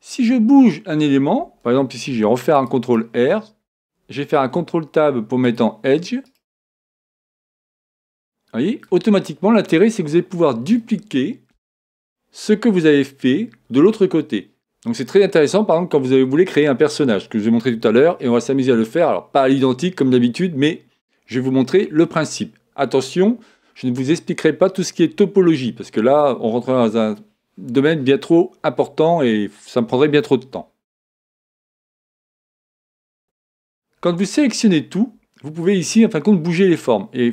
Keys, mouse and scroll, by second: 2.1 ctrl+r, 4.4 ctrl+Tab, 6.2-8.2 right drag, 7.8-9.6 drag, 9.2-11.1 middle drag, 33.2 a, 34.0 a, 35.6-37.3 drag.